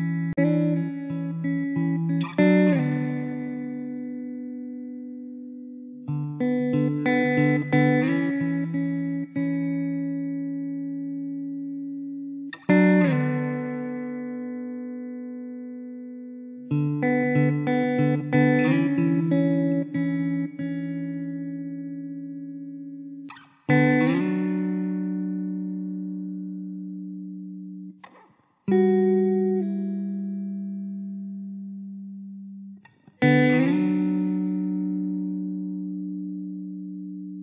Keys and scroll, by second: 1.3 Tab, 3.2 `, 4.6 alt+z, 7.8 Tab, 9.1 3, 9.9 `, 17.7 e, 18.9 s, 20.0 e, 21.3 s, 22.4 e, 27.4 e, 29.1 `, 30.0 alt+z, 30.9 Tab, 31.4 alt+z, 33.4 `, 34.9 KP_0.